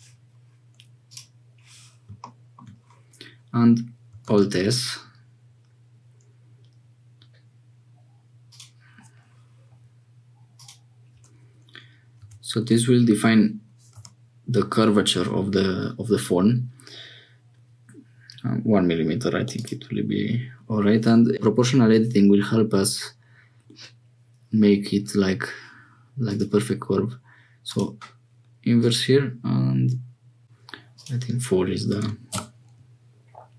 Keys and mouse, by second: 4.2 alt+s, 10.5-16.5 drag, 19.5 click, 26.3-27.7 drag, 28.7-30.4 drag, 30.9-33.5 drag.